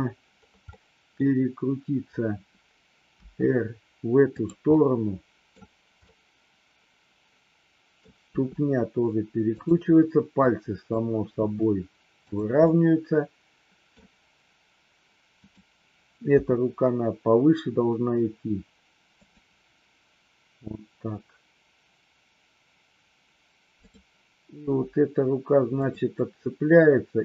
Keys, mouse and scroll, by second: 0.7 middle click, 3.2 r, 4.4 click, 4.7 middle click, 5.5-6.0 scroll down 1, 6.0-8.0 middle drag, 8.0 scroll down 1, 8.2 r, 9.5 click, 10.4 click, 11.4 r, 12.2 click, 12.6-13.9 middle drag, 15.4 click, 16.2 g, 19.2 click, 23.7 click, 24.6 g, 25.7 click.